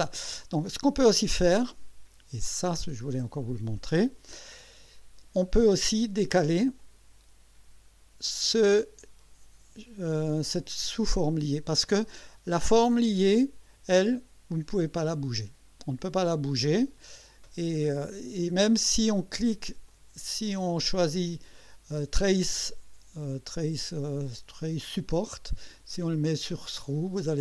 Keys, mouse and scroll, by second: 2.5-5.0 drag, 6.8 click, 13.4 click, 19.9 click, 24.0 click, 25.7 click, 26.2 click, 27.3 click.